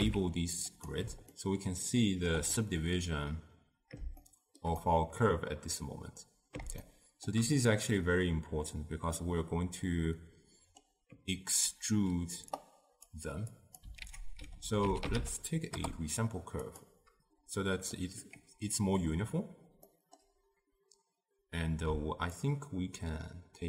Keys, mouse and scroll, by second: 1.0 z, 1.4-15.9 ctrl+middle drag, 15.9 ctrl+a, 18.1-22.6 middle drag, 22.6-23.6 shift+drag.